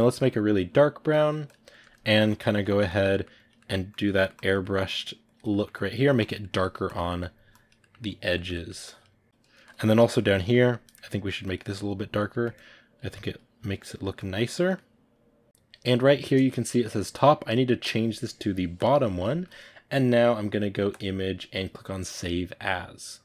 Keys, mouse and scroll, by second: 0.0 click, 1.4 click, 1.6 ctrl+middle click, 2.2 click, 2.4 ctrl+middle click, 2.8 click, 3.0 middle click, 3.3 click, 3.5 middle click, 3.8 click, 4.0 middle click, 4.2 click, 4.5 middle click, 4.7 click, 5.4 middle click, 5.7 click, 6.3 ctrl+middle click, 6.7 click, 7.0 middle click, 7.4 click, 7.7 middle click, 7.9 click, 8.2 ctrl+middle click, 8.7 click, 9.5-11.2 shift+middle drag, 11.2 click, 11.5 middle click, 11.8 click, 12.2 ctrl+middle click, 12.4 click, 13.0 ctrl+middle click, 13.3-14.4 drag, 14.4-15.4 middle drag, 15.4-18.7 drag.